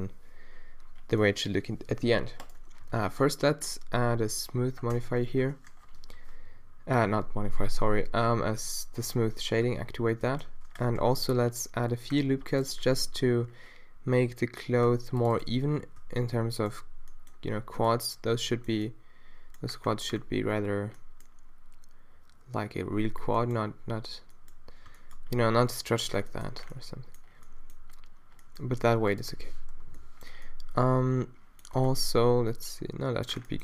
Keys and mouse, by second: 2.4 middle click, 2.9 t, 3.1 right click, 3.8-5.0 middle drag, 5.0 Tab, 5.2 a, 5.4 a, 6.0 ctrl+n, 9.7 Tab, 10.5 Tab, 11.0 ctrl+r, 13.3 ctrl+r, 16.0 a, 17.2 middle click, 17.6 middle click, 18.2 middle click, 18.8 middle click, 19.4 middle click, 23.4-24.5 middle drag, 25.3-26.4 middle drag, 26.6 middle click, 27.5 middle click, 28.5 middle click, 29.7-30.7 middle drag, 29.7 -.